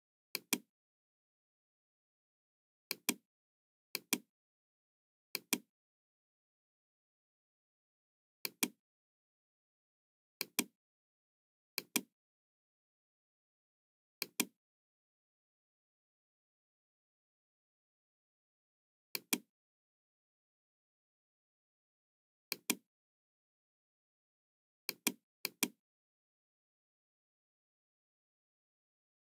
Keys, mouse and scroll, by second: 0.3 click, 2.8 click, 3.9 click, 5.2 click, 8.4 click, 10.3 click, 11.6 click, 14.1 click, 15.6 KP_1, 15.9 KP_3, 16.2 KP_0, 16.4 Return, 19.1 click, 19.5 KP_1, 20.1 Return, 20.1 KP_0, 20.1 KP_3, 22.4 click, 24.7 click, 25.4 click.